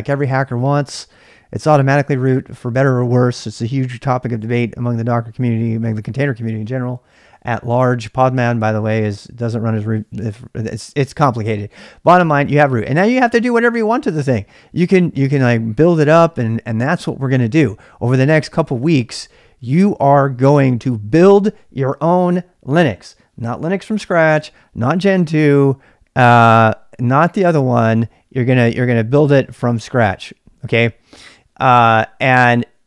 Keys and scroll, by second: 0.5 typing.